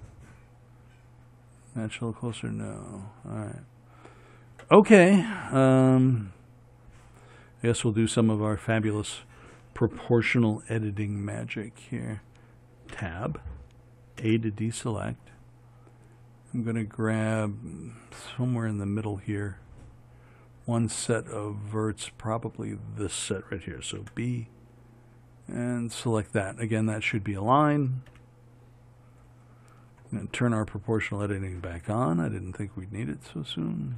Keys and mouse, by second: 13.2 Tab, 14.5 a, 24.3 b, 28.4 KP_1.